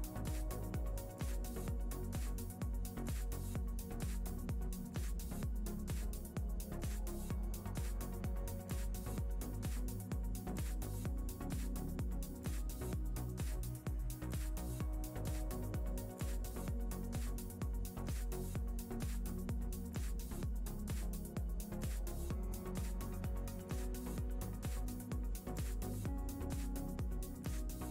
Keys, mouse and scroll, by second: 1.6 BackSpace, 8.3 click, 10.3 click, 12.9 click, 14.6 KP_0, 17.9 click, 20.8 shift+middle click, 21.4 ctrl+middle click, 23.9 click, 25.4 KP_0.